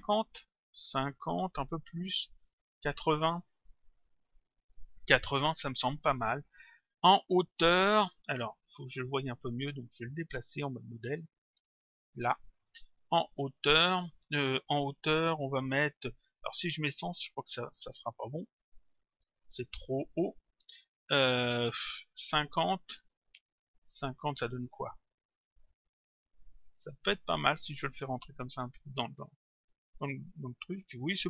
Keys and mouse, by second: 0.1 Return, 2.2 click, 3.6 Return, 7.5 click, 9.7 click, 11.1 click, 15.3 click, 16.7 Return, 18.6 click, 21.5 click, 22.9 Return, 24.5 click, 29.3 click.